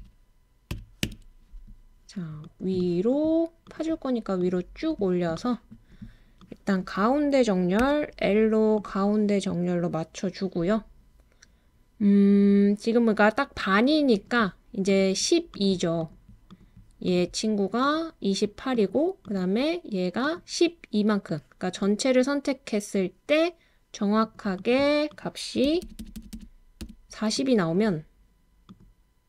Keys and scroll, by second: 0.0-1.0 typing, 7.8 typing, 11.9-12.6 typing, 25.6-26.8 typing.